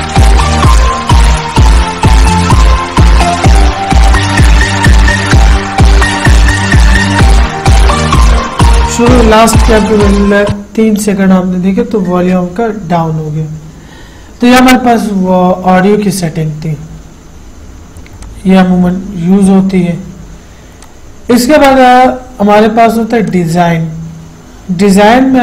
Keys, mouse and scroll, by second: 0.5 Right, 18.4-21.0 drag, 23.5 click.